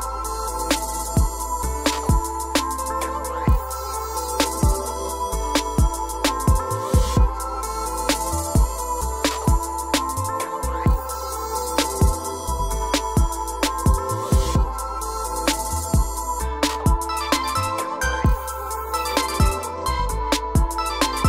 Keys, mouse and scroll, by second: 0.9 click, 1.7-2.1 scroll down 4, 2.4 o, 2.8 scroll, 3.1 click, 6.0 click, 6.7 click, 7.5 ctrl+click, 8.2 q, 9.9 scroll up 6, 11.1 click, 11.9 click, 12.9-15.7 typing, 13.9 Return, 15.7 Return, 16.9-17.9 scroll down 13, 18.2 click, 19.3-19.8 scroll, 20.4 o.